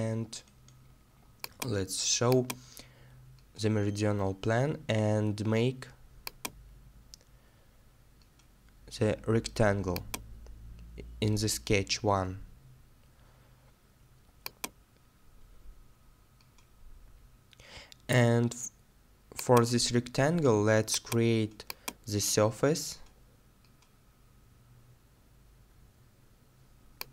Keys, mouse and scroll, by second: 0.2-2.2 scroll up 1, 15.2 middle click.